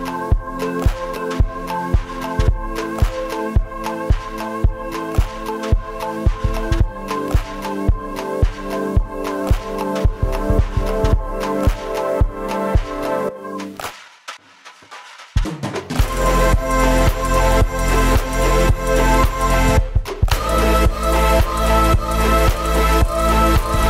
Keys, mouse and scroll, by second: 1.0 s, 3.4 h, 4.0 g, 6.7 s, 7.2-7.8 right drag, 7.8 g, 8.3 right click, 8.4-8.9 middle drag, 8.9 r, 9.7 shift+right click, 10.0 middle click, 10.3 shift+d, 11.1 shift+right click, 11.2-11.6 middle drag, 11.6 shift+right drag, 12.1 ctrl+j, 13.2 click, 13.6 right drag, 13.9 KP_0, 14.1-14.4 scroll down 1, 14.4 right click, 14.8 g, 16.1 right click, 16.8 right click, 17.3 r, 17.9 right click, 19.0-19.6 middle drag, 19.6 KP_0, 19.8 scroll down 2, 20.0 scroll up 1, 20.3-20.6 scroll down 1, 21.4-22.3 middle drag, 22.3 right click, 22.4 middle click, 22.6 scroll up 1, 22.8 middle click, 23.5 shift+a.